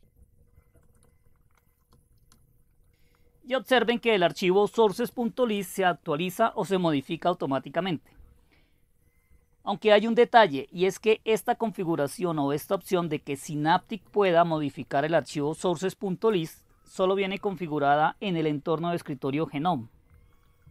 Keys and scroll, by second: 1.0 alt+Tab, 1.9 Up, 4.4-5.5 typing, 5.5 alt+Tab, 13.1 alt+Tab, 13.7 Up, 14.0 Up, 14.2 Return, 16.0 alt+Tab.